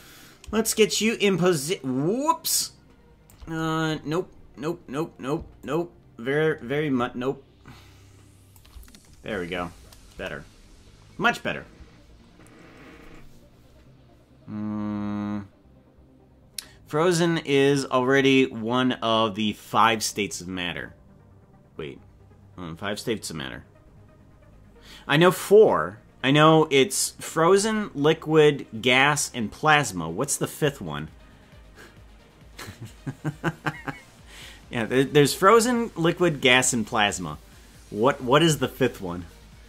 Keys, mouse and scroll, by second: 1.0-3.4 shift+drag, 4.0 scroll down 1, 5.3 scroll down 12, 5.6-8.6 shift+drag, 10.1 KP_0.